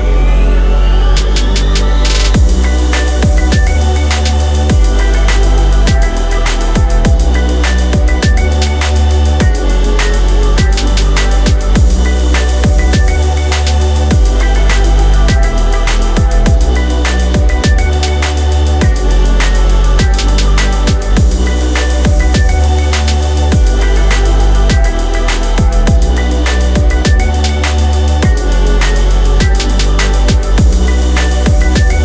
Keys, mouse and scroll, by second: 19.2 s.